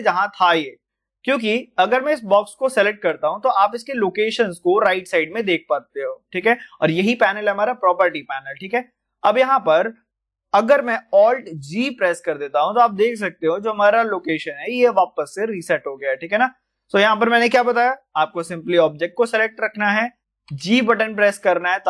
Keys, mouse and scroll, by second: 15.3 alt+g, 15.3-19.0 middle drag, 19.0 click, 20.4 g.